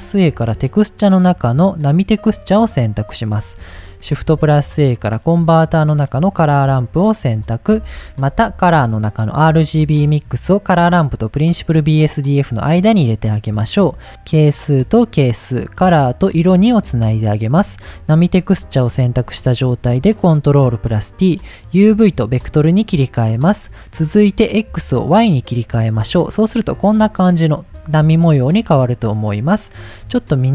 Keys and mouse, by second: 3.2 middle click, 4.0 shift+a, 7.0 click, 7.9 shift+a, 8.4 shift+a, 12.7 middle click, 13.9-14.9 drag, 15.6-16.8 drag, 17.7 click, 19.3 ctrl+t, 19.7 middle click, 20.9-22.0 drag, 24.5-25.2 drag, 29.2 middle click.